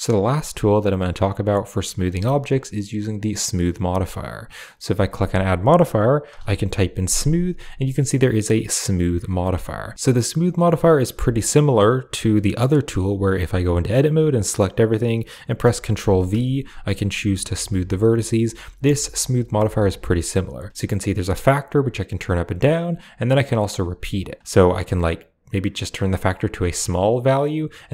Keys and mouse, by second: 4.7-8.8 drag, 6.3 m, 10.7 middle click, 12.2 middle click, 13.4 Tab, 15.9 ctrl+v, 18.7 Tab, 19.7-22.4 drag, 23.2 click, 23.7 click, 24.4-26.0 drag, 26.7 click, 27.1 click, 27.8 click.